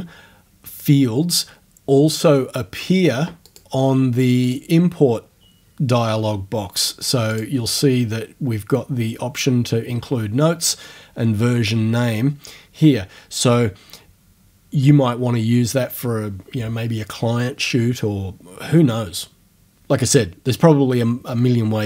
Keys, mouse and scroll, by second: 3.5 click, 4.5 click, 7.3 click.